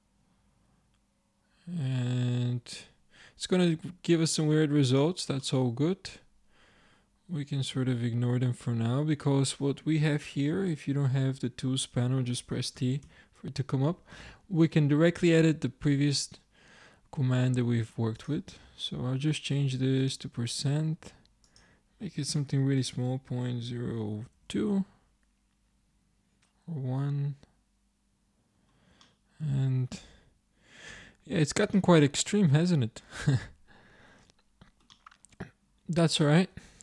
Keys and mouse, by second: 5.5 click, 12.8 t, 13.1 t, 18.2-20.8 drag, 21.5-26.2 drag, 28.4-29.4 middle drag, 29.7-32.4 middle drag, 32.4 middle click, 32.6 middle click, 32.8 middle click, 33.5-36.0 middle drag, 36.0 middle click, 36.6 ctrl+Tab.